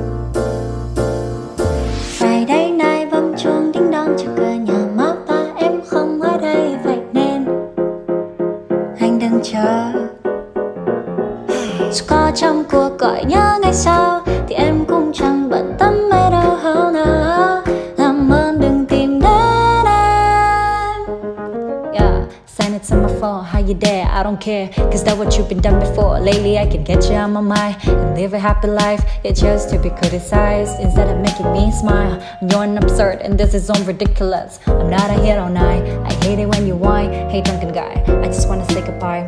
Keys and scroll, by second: 32.5 space, 34.9 space.